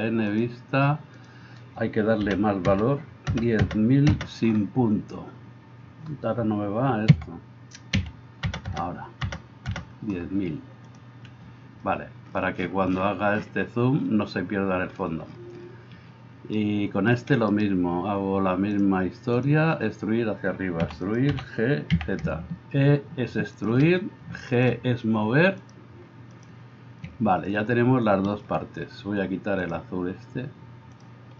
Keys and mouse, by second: 1.4-11.0 drag, 3.7 KP_0, 8.8 KP_0, 16.7 shift+middle click, 17.5-18.9 right drag, 18.9-21.3 drag, 20.9 e, 21.3-25.6 middle drag, 21.3 g, 25.6-31.3 drag.